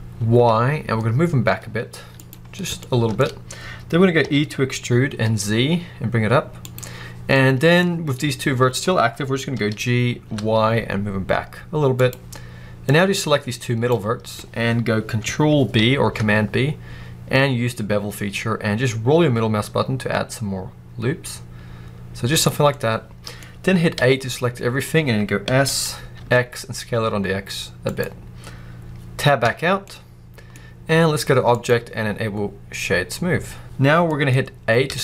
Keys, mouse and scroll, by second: 2.2 click, 2.3-2.7 scroll down 1, 2.7 shift+middle click, 3.1-4.1 scroll up 2, 4.1 e, 6.6 click, 7.2 scroll down 2, 7.3-12.0 middle drag, 9.4 g, 12.0 click, 12.7 click, 15.7 ctrl+b, 22.3 click, 22.6 middle click, 23.8 a, 24.2 middle click, 25.3 s, 27.9 click, 29.3 Tab, 29.7-31.4 middle drag, 30.5-31.4 scroll up 2, 31.4-34.0 drag, 34.0-35.0 middle drag, 34.7 a.